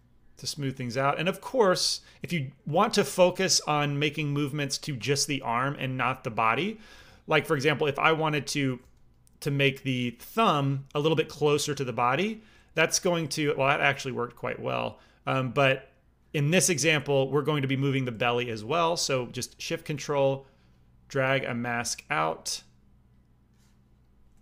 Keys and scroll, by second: 6.9 f, 7.5 f, 8.7 f, 13.0 ctrl+z, 13.2 f, 13.9 f, 18.1 ctrl+z.